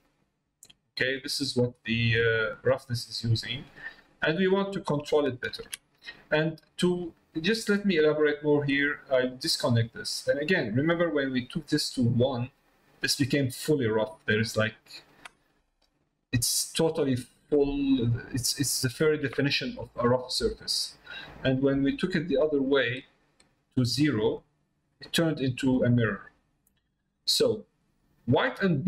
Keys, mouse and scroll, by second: 0.6 middle click, 5.1 ctrl+shift+click, 8.6-9.7 drag, 10.1 middle click, 11.9 click, 14.1 middle click, 15.5 middle click, 16.3 middle click, 16.9 middle click, 17.6 middle click, 18.5 middle click, 19.5 shift+middle click, 19.9 middle click, 22.1-23.7 drag, 25.4 middle click, 26.9 middle click, 27.6 middle click, 28.4 middle click.